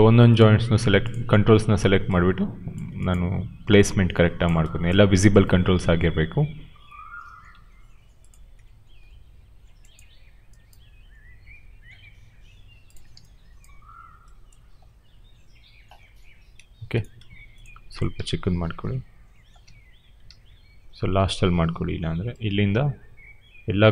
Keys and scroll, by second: 18.1 r, 19.6 w, 20.1 ctrl+z.